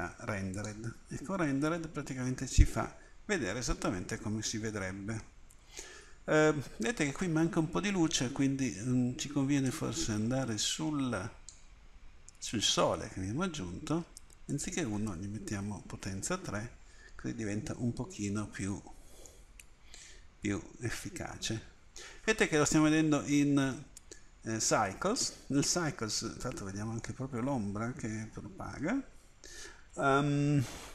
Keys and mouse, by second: 0.6-2.0 drag, 9.7-16.3 drag, 16.4 middle click, 18.1-19.3 middle drag, 20.4 middle click, 27.1-28.9 drag.